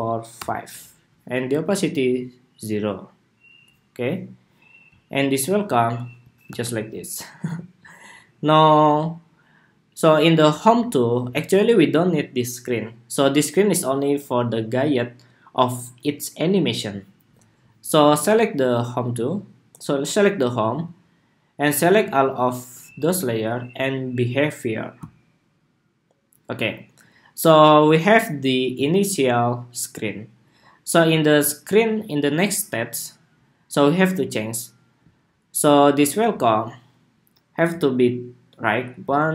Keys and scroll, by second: 6.2 super+-.